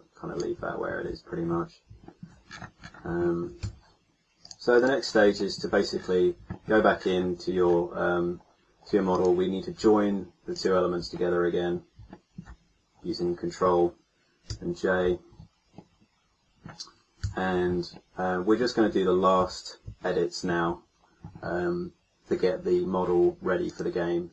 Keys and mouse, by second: 3.6 a, 11.2-12.3 middle drag, 14.5 ctrl+j, 17.1 KP_1, 19.3 a, 23.7-24.3 drag.